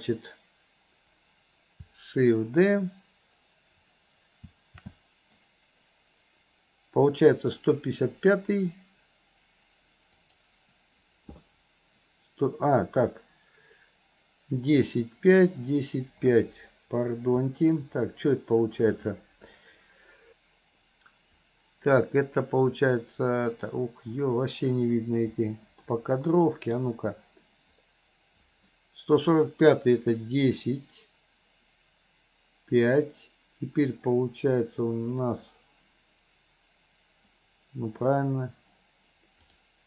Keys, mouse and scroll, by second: 25.8-26.9 middle drag, 39.6 click.